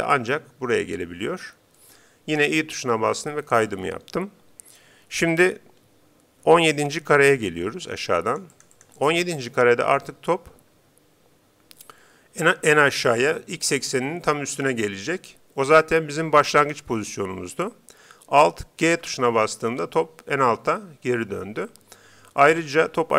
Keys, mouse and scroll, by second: 0.3-1.9 drag, 2.8 i, 8.3-11.1 drag, 19.5 alt+g.